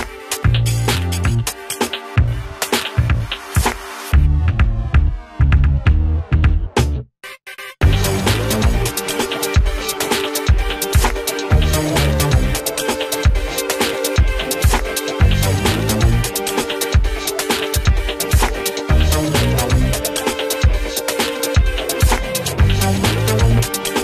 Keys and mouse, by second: 3.4-9.5 drag, 12.9 click, 20.2 ctrl+z, 20.6 click, 23.1 ctrl+z.